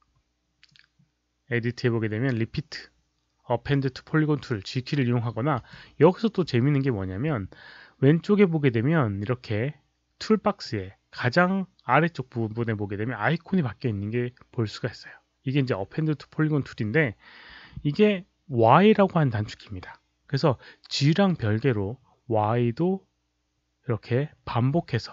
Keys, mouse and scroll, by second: 5.4 right click.